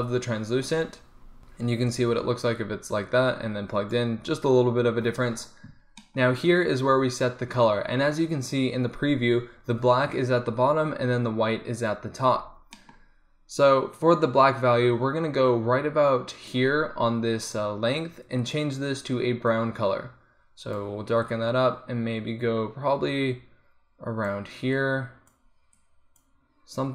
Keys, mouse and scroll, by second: 1.7 middle click, 2.0-4.0 drag, 7.1-12.4 middle drag, 14.0-17.7 drag, 18.6-23.1 drag.